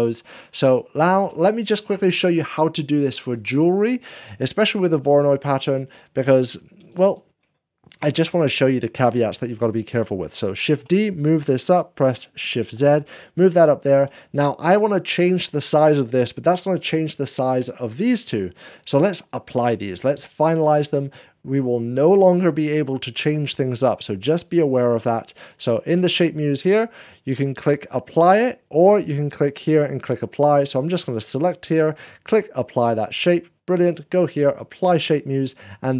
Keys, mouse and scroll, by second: 0.1-1.1 drag, 0.2 scroll down 1, 0.8 shift+middle click, 0.8 scroll up 1, 0.9 scroll down 1, 1.3-4.7 drag, 10.6 scroll down 1, 10.6 shift+d, 12.6 shift+z, 13.5 shift+d, 13.6 click, 16.6-35.9 drag.